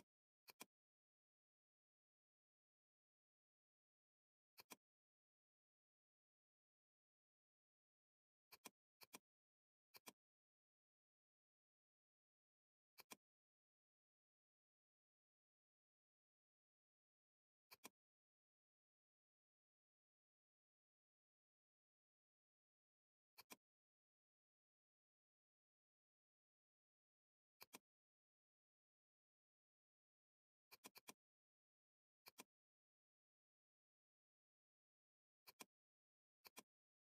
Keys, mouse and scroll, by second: 4.0-4.6 scroll up 1, 4.6 click, 5.8 ctrl+=, 7.8 ctrl+0, 8.5 click, 13.0-15.9 drag, 15.9 ctrl+z, 17.7-23.4 drag, 25.1-26.1 scroll down 1, 26.5 ctrl+0, 27.6 click, 30.8-35.6 drag.